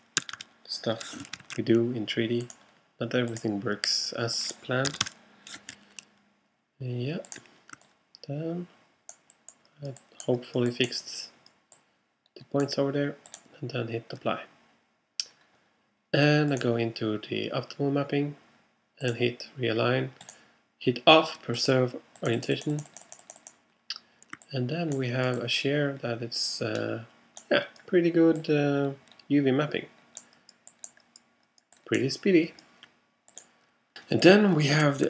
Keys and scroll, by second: 0.2 3, 0.4 Return, 1.4 super+Return, 1.5 super+z, 5.0 2, 5.1 Return.